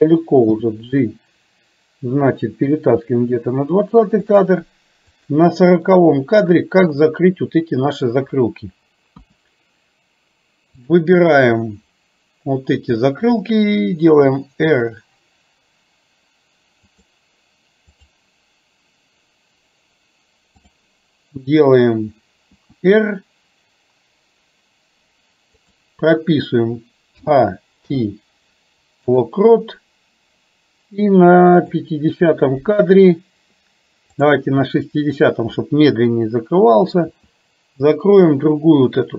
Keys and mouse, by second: 0.6 g, 5.2 click, 6.0-8.1 middle drag, 9.2 KP_1, 10.9 click, 14.2 r, 18.0 click, 22.6 r, 27.2 a, 27.8 i, 31.7 click, 34.2-35.4 drag, 37.2 r.